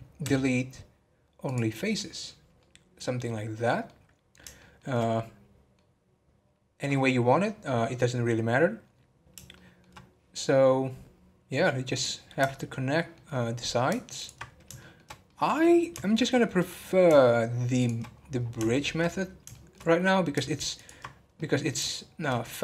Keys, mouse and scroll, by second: 0.2 x, 2.6-3.9 middle drag, 3.9 scroll down 1, 4.5-9.5 shift+middle drag, 9.5-11.9 shift+middle drag, 11.9 click, 12.5 shift+middle click, 13.4 scroll up 1, 14.1-14.8 ctrl+drag, 14.8 shift+middle click, 15.6 scroll down 2, 16.1 shift+middle click, 16.4 scroll up 4, 17.8 shift+click, 18.1-18.7 scroll down 8, 18.7 shift+middle click, 19.1 scroll up 3, 19.5 shift+middle click, 19.7 scroll up 4, 20.7 ctrl+click, 21.1 scroll down 3, 21.4-22.4 middle drag, 22.4 scroll down 3.